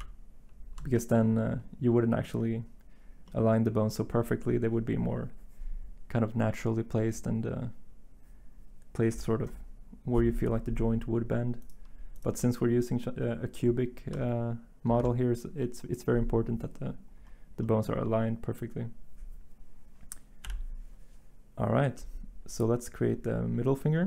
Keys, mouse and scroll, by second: 14.9 z, 20.4 7.